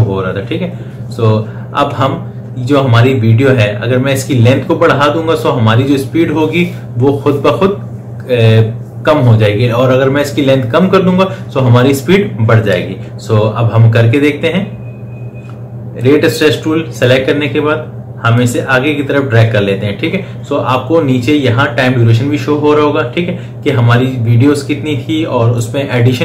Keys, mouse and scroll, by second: 15.8-26.2 drag.